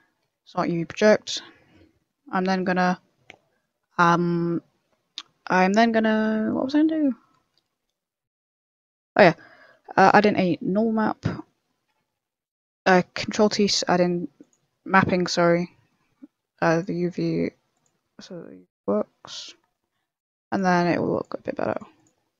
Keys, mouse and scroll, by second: 0.2 Tab, 0.5 scroll down 3, 0.8 scroll up 4, 1.2 middle click, 1.8 middle click, 2.2 scroll up 1, 2.2 middle click, 2.9 scroll down 3, 3.2 middle click, 3.9 scroll down 3, 4.4 middle click, 6.0 middle click, 9.0 middle click, 9.5 middle click, 9.9 click, 10.3 ctrl+t, 11.2 middle click, 11.9 scroll up 3, 12.2 a, 13.0 scroll down 4, 13.2 middle click, 13.6 middle click, 13.9 scroll up 2, 14.4 click, 14.8 ctrl+t, 15.6 middle click, 16.7 click, 17.4 ctrl+t, 18.0 click, 18.8 ctrl+t, 19.3 middle click, 20.4 click, 21.1 click, 21.9 click.